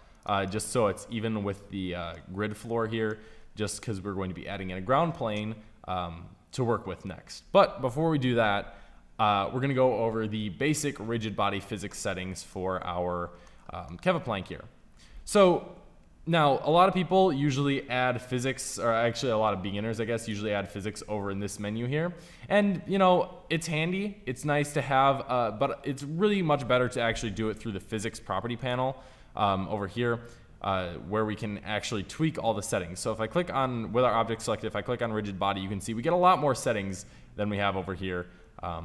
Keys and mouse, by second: 0.4-2.1 drag, 2.1-6.9 middle drag, 12.4-16.6 middle drag, 16.6 t, 17.6-22.0 drag, 27.2 t, 28.5-30.4 drag, 31.7-37.8 drag, 36.4 t, 37.8 t.